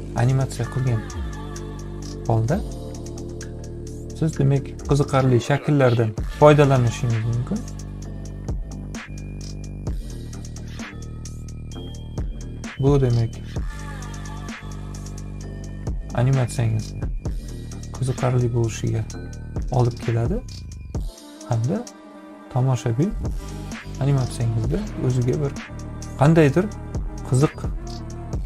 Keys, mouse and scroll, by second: 4.7 click, 6.0 click, 7.7-10.2 drag, 11.3 click, 13.2 ctrl+z, 14.6 click, 16.8 click, 17.5 click, 18.4 click, 19.1 click, 20.2-21.3 drag, 23.1 click, 27.1-28.2 drag.